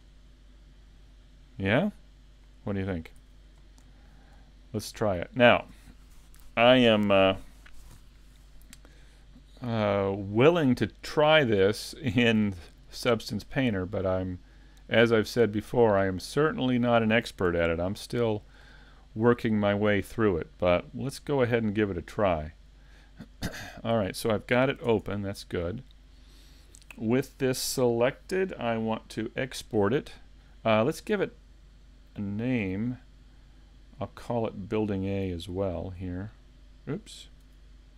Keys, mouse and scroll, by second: 1.7 click, 4.0 shift+middle click, 4.7 middle click, 10.1 shift+middle click, 11.0 middle click, 12.7 shift+middle click, 13.2 scroll up 1, 13.7 middle click, 15.8 shift+middle click, 16.3 scroll down 1, 16.8 shift+middle click, 34.5 click.